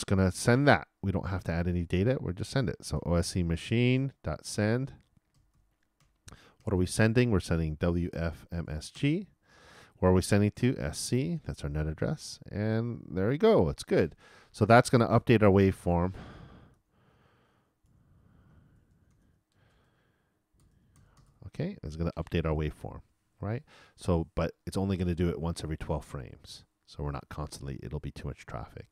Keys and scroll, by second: 5.8 shift+d, 6.6 shift+9, 7.8 shift+w, 11.1-12.2 typing.